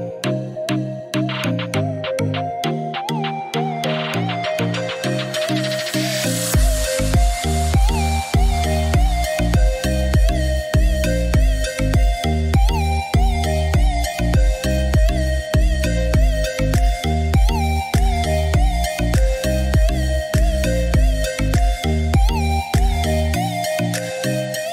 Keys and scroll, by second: 15.6-17.1 typing.